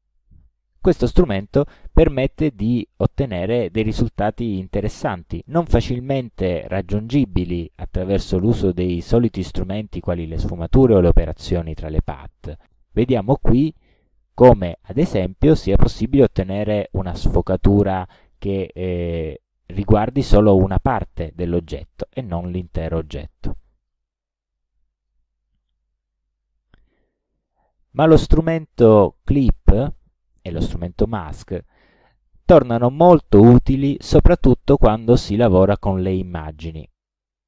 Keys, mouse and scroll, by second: 4.0 click, 11.2 click, 12.9 click, 18.5 click, 19.3 click, 20.1-20.6 ctrl+scroll down 4, 21.2 ctrl+scroll up 1, 22.1 ctrl+scroll up 2, 22.2 ctrl+click, 23.8 click, 24.6 click, 26.2 Delete, 27.1 click, 35.9 click.